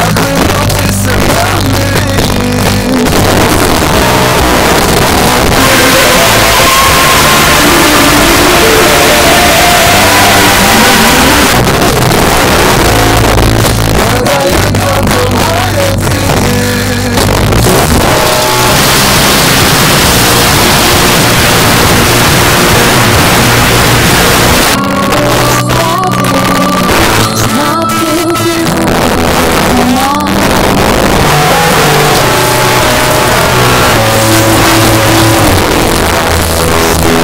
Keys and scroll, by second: 0.1 Down, 0.3 Down, 0.6 Down, 0.8 Return, 11.5 Page_Down, 24.6 Page_Down.